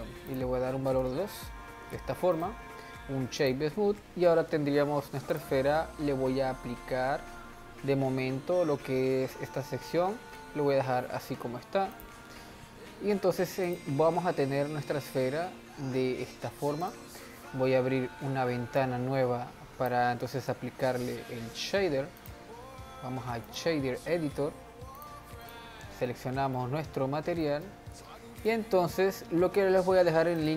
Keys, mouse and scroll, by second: 2.4-5.3 right drag, 5.3-8.4 drag, 11.9-13.8 drag, 15.9-16.4 scroll up 2, 16.4-16.8 scroll down 2, 16.8 click, 18.8-20.6 drag, 20.6-21.1 scroll up 1, 21.1-22.2 scroll up 1, 22.2-24.5 drag, 24.5 n, 25.0-26.1 drag, 26.1 middle click, 26.9-27.4 scroll up 2, 27.4 middle click, 28.4 click.